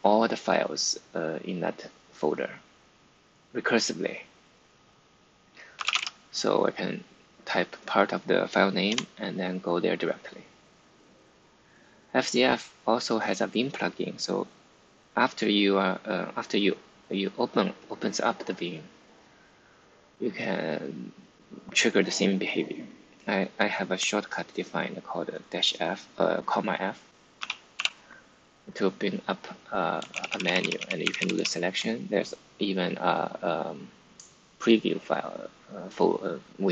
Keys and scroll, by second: 5.4-6.3 typing, 8.8 Return, 27.3 ,, 27.7 f, 30.0 Page_Down, 30.2 Page_Down, 30.4 Down, 30.5 Down, 30.7 Down, 30.9 Up, 31.1 Up, 31.3 Up.